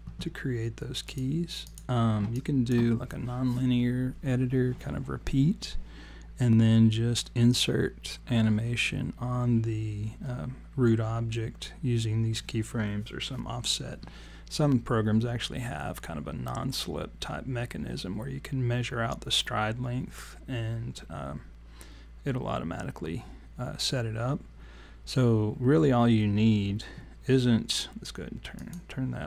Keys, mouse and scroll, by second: 1.1 click, 1.6 click, 2.4 alt+click, 2.7 alt+click, 28.6 click.